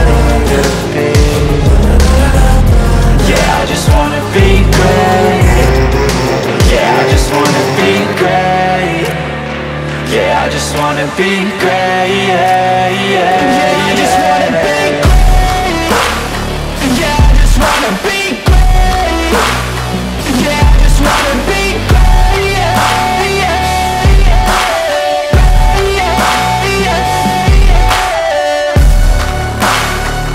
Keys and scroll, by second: 0.9 F4, 1.3 Escape, 4.6 shift+F2, 5.2 shift+Page_Up, 5.6 F3, 8.2 F3.